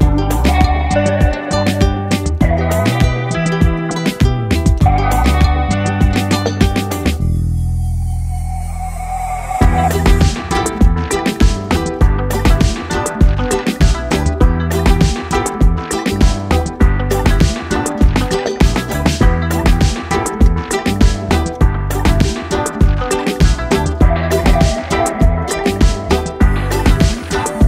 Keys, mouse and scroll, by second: 1.6-8.9 drag, 6.8 space, 7.4 space, 10.0-13.4 drag, 18.3 space, 18.7-19.2 click, 19.0 space, 19.6 click, 24.4 click.